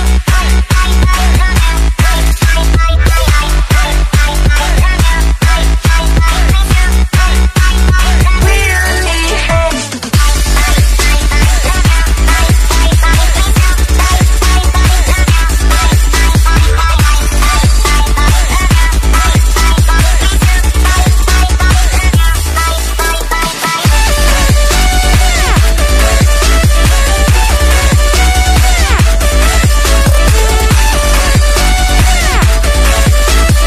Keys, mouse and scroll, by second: 0.0-0.5 typing, 0.7 click, 5.8 click, 9.3-11.3 typing, 11.3 click, 12.1 Delete, 12.8 click, 13.0 Delete, 13.2 click, 13.7 click, 15.9 Return, 16.3 click, 17.2 BackSpace, 17.3 /, 17.9 click, 18.2 Right, 19.1 click, 20.0 click, 20.1-20.5 alt+scroll down 2, 20.8 alt+scroll up 1, 21.3 click, 22.2 alt+scroll down 1, 22.9 alt+scroll down 3, 23.4 scroll up 1, 24.0 click, 24.7-25.1 scroll down 1, 25.1 click, 31.4 s, 32.1 s, 32.7 click.